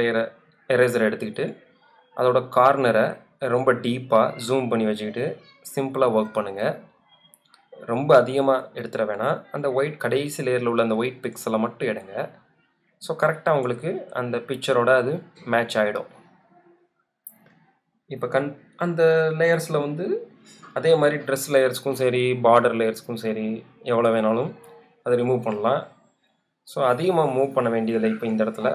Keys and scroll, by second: 28.0 super+0.